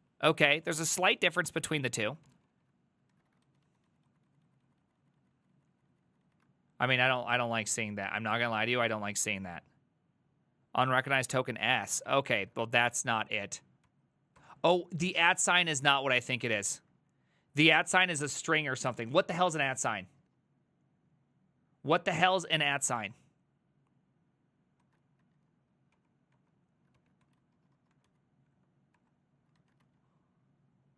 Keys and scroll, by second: 0.8 shift+a, 1.1 ctrl+c, 1.3 ctrl+c, 1.7 ctrl+a, 2.0 3, 2.3 ctrl+c, 2.5 ctrl+c, 3.1 ctrl+a, 3.5 ctrl+u, 3.5 [, 3.7 ctrl+u, 3.9 ctrl+u, 4.1 ctrl+u, 4.4 ctrl+u, 4.5 ctrl+u, 4.7 ctrl+u, 4.9 ctrl+u, 5.0 ctrl+u, 5.2 ctrl+u, 5.4 ctrl+u, 5.6 ctrl+u, 5.8 ctrl+u, 5.9 ctrl+u, 6.1 ctrl+u, 6.3 ctrl+u, 11.7 a, 12.1 ctrl+c, 12.3 ctrl+c, 12.4 ctrl+a, 12.7 1, 13.9 ctrl+t, 14.4 ctrl+h, 15.4 ctrl+a, 15.6 2, 15.9 Up, 16.8 ctrl+Left, 17.0 ctrl+Left, 17.2 ctrl+Left, 17.3 ctrl+Left, 17.5 ctrl+Left, 17.7 ctrl+Left, 17.9 ctrl+Left, 20.2 BackSpace, 23.0 Return, 24.9 ctrl+a, 25.3 3, 26.0 Up, 26.4 Up, 27.0 ctrl+c, 27.0-28.6 typing, 29.0 Return, 29.6 ctrl+a, 29.9 2.